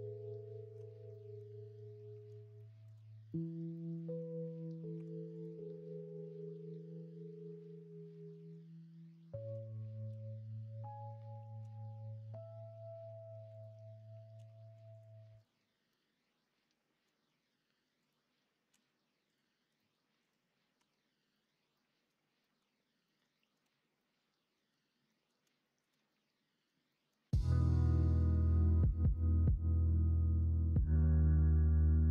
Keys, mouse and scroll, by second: 1.1-1.4 scroll up 1, 2.5 shift+scroll up 1, 2.7 shift+middle click, 3.2-4.0 scroll up 2, 4.9 3, 14.3 x, 15.9-17.0 middle drag, 18.7 x, 19.7 middle click, 20.7 Tab, 21.3 middle click, 21.7-22.0 middle drag, 22.4 middle drag, 23.0 middle click, 23.3 shift+middle drag, 23.9-24.7 middle drag, 25.0 middle drag, 25.6 shift+middle drag, 26.0-26.6 middle drag, 26.8 middle drag, 27.8 shift+middle drag, 29.1 middle drag, 30.0 middle click, 30.6 shift+middle drag, 31.2-32.0 middle drag.